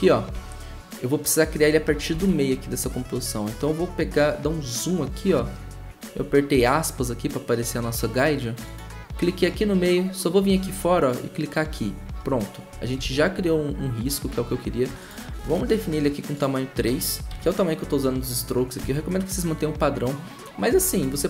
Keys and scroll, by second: 2.2 `, 6.1 `, 13.0 `, 15.4 3, 17.3 shift+`, 18.8 v.